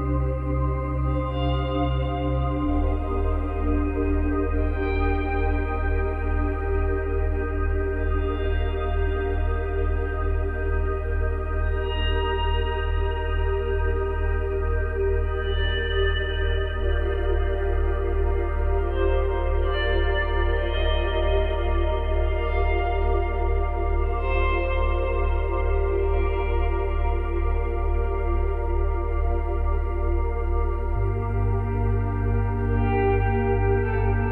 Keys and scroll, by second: 2.2 space, 7.0 space, 16.0 space.